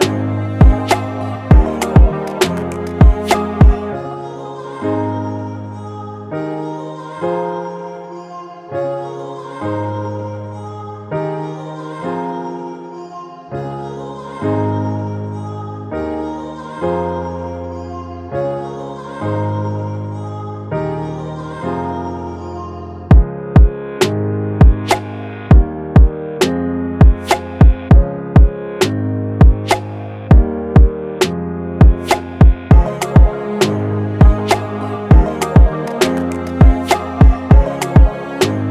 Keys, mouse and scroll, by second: 8.3 alt+click, 15.4 double click, 19.7-22.6 typing, 24.0-24.7 typing, 29.3 double click, 36.2 double click.